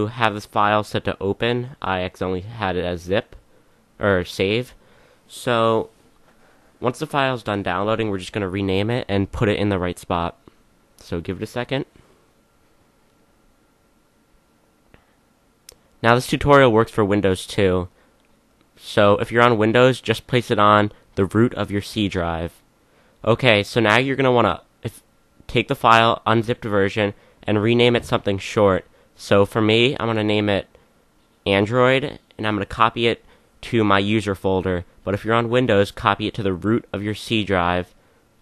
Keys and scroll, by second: 26.7-28.4 typing, 30.2-32.8 typing.